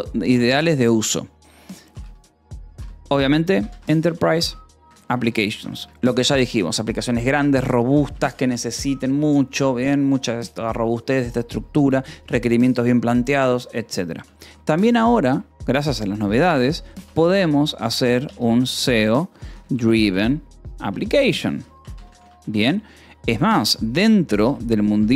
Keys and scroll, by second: 1.9-5.7 typing, 6.6 ctrl+s, 7.4 o, 7.9 -, 8.4 space, 14.6 e, 14.9 space, 15.2 BackSpace, 16.4-25.1 typing, 23.1 ctrl+s.